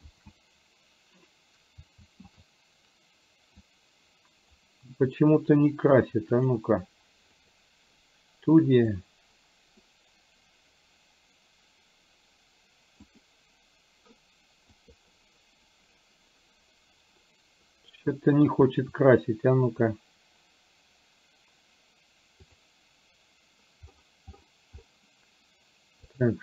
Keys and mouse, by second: 0.1 shift+z, 3.7 click, 6.5-8.1 drag, 9.1 click, 13.5 click, 14.7-18.1 drag.